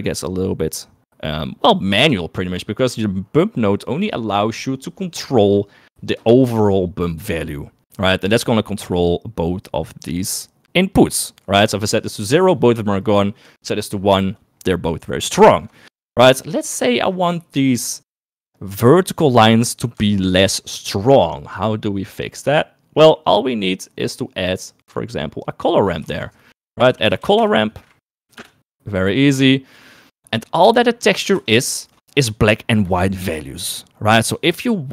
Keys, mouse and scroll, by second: 2.7 middle click, 8.8-15.7 drag, 15.9 ctrl+z, 20.5 shift+middle click, 21.8 middle click, 22.7 middle click, 23.3 middle click, 24.1 middle click, 25.0 click, 26.5 shift+a, 30.2 click, 31.0 middle click, 31.3 middle click, 31.8 ctrl+shift+click.